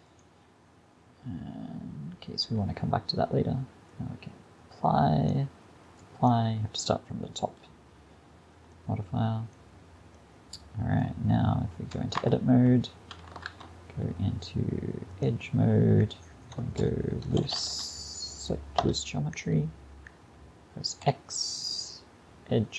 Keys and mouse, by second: 0.1-2.3 drag, 3.9-8.2 drag, 8.2-9.2 middle drag, 12.2 Tab, 13.5 ctrl+Tab, 16.6 space, 17.6 o, 21.1 x.